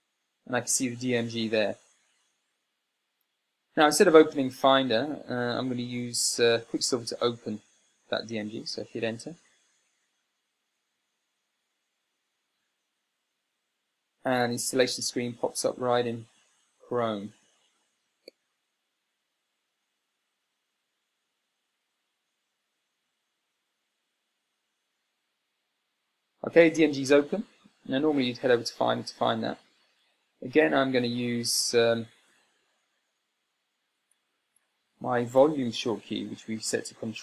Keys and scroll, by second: 34.8 Escape.